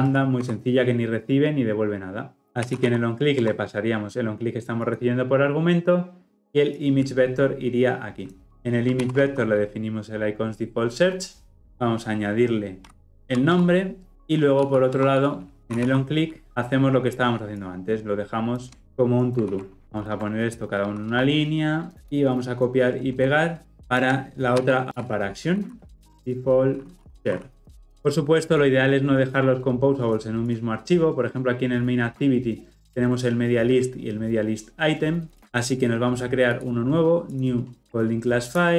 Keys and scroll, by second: 0.4 Escape, 9.0 ctrl+v, 11.6 alt+Return, 16.5 Return, 18.8 ctrl+c, 19.4 ctrl+v, 19.8 ctrl+alt+o, 21.0 alt+Return, 24.6 ctrl+c, 24.8 ctrl+v.